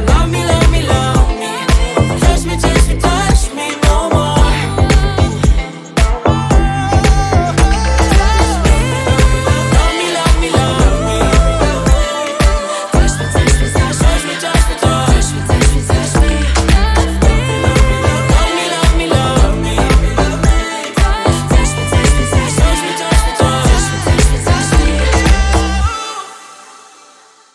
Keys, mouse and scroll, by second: 0.8 ctrl+a, 4.3 ctrl+a, 5.4 BackSpace, 7.0 Down, 9.1 click, 9.4 click, 10.1 middle click, 10.6-11.1 scroll up 2, 11.1 click, 11.8-12.2 drag, 12.2-13.1 middle drag, 13.1-15.4 drag, 15.4 x, 16.0 ctrl+a, 20.4-23.1 drag, 23.1 middle click, 23.8 click, 24.3 click, 24.7 ctrl+a.